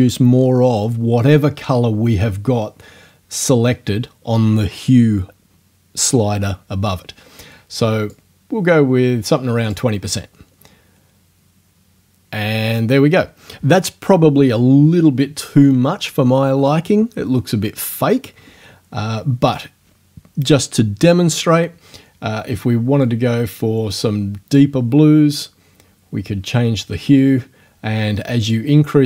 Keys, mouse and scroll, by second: 8.1 click, 23.0 click, 28.4 click.